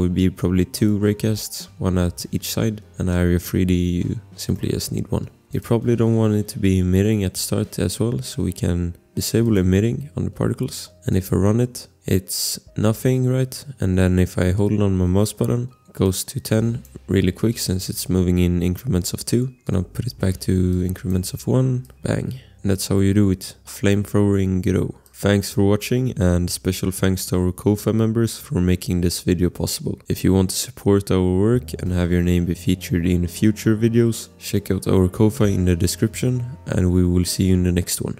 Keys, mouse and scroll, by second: 3.1 click, 4.5 click, 4.8 click, 4.8-5.2 scroll, 5.9 scroll, 10.9 click, 10.9 scroll, 11.1 click, 13.5 click, 15.3 click, 21.1 1, 22.5 click.